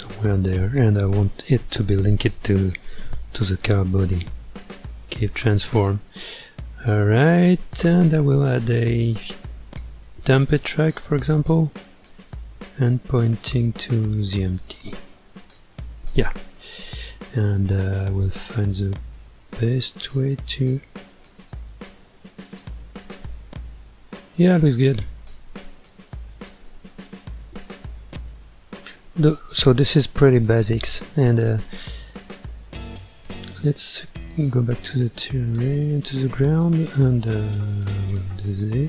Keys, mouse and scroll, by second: 1.3 shift+click, 3.5 ctrl+p, 7.1 click, 8.5-11.5 drag, 12.8 click, 18.1 click, 19.4-21.4 middle drag, 21.4 click, 21.9 g, 22.8-23.7 middle drag, 23.7 g, 24.8-26.9 middle drag, 26.9-27.3 scroll down 1, 27.3-29.7 middle drag, 29.7-30.2 scroll down 2, 30.2-32.8 middle drag, 32.8 click, 36.5 click, 37.8 click.